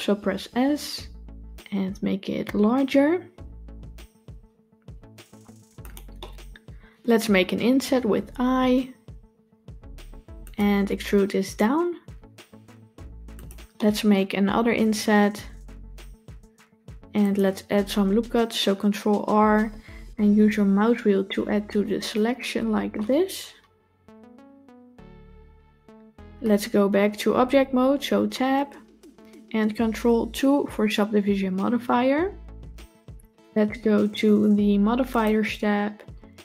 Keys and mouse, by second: 0.2 s, 6.0 middle click, 7.7 i, 13.6 middle click, 19.3 ctrl+r, 22.9-26.3 middle drag, 28.2 Tab, 30.4 ctrl+2.